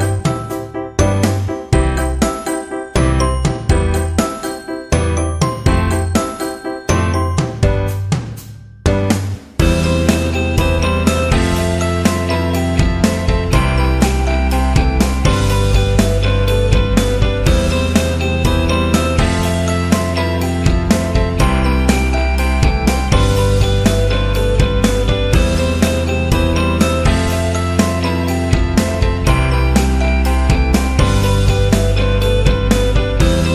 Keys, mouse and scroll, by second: 0.5-1.6 drag, 2.5 shift+a, 3.2 click, 3.8 click, 4.4 s, 5.5 middle click, 6.1 s, 6.5 s, 7.8 KP_0, 8.5 shift+z, 11.0 click, 11.6 KP_0, 13.5 shift+z, 13.7 KP_1, 14.2 middle click, 15.0 KP_3, 15.7 click, 16.4 click, 16.8 r, 17.6 KP_0, 18.4 shift+z, 21.9 shift+z, 22.4 middle click, 23.0 middle click, 24.3-25.4 drag, 25.7 click, 26.5-28.6 drag, 28.7 click, 29.8 click, 30.2 middle click, 30.8 click, 31.7 shift+z.